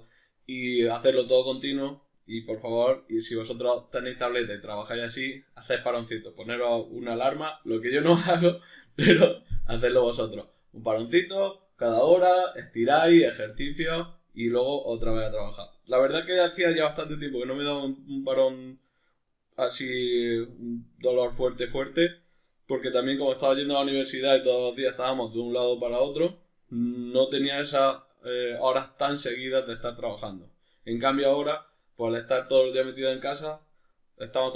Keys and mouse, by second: 22.4 middle click, 27.2 middle click.